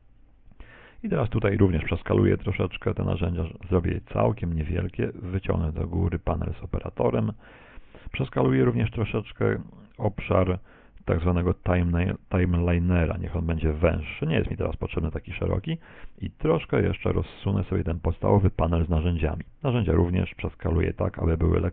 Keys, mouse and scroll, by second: 0.0 t, 1.0 ctrl+middle click, 6.2 click, 10.5 click, 16.8 click, 20.4 ctrl+middle click.